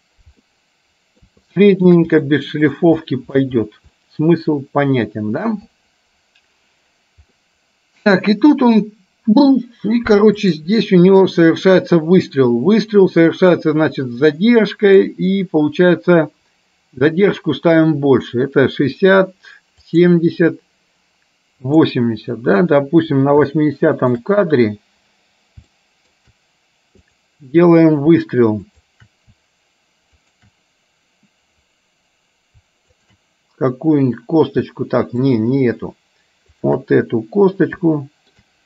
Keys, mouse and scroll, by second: 0.8 middle click, 1.6 shift+middle click, 2.3 middle click, 3.1 shift+middle click, 4.1-5.6 middle drag, 7.5-8.6 middle drag, 10.6 click, 11.3-13.7 drag, 14.5 middle click, 20.1 click, 21.8 click, 23.6 shift+middle click, 25.8 shift+middle click, 27.2 click, 28.7 shift+click, 30.2 shift+click, 33.1 shift+click, 35.5 shift+click, 36.6 shift+click, 38.0 shift+middle click.